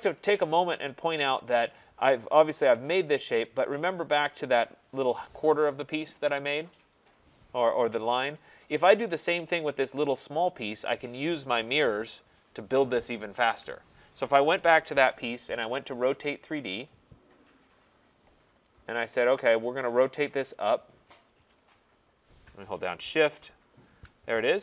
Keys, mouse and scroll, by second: 1.2-3.2 scroll, 4.0 click, 16.8 click, 17.8 click, 19.6 click, 20.5 click, 21.4 click, 23.9 shift+click.